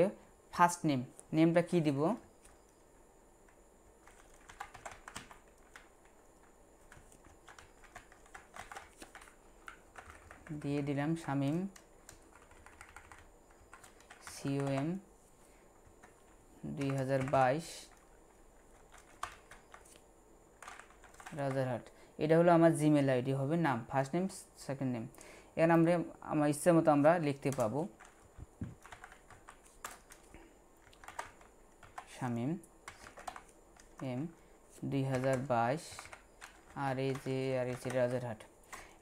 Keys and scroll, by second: 3.9-5.1 typing, 7.3-8.8 typing, 10.1-11.8 typing, 12.4 shift+Right, 12.5 shift+Right, 13.2 shift+Right, 14.4 typing, 16.6 Tab, 16.7-17.5 typing, 18.6-19.6 typing, 20.9-21.7 typing, 27.5 BackSpace, 28.7-33.8 typing, 35.1-38.0 typing.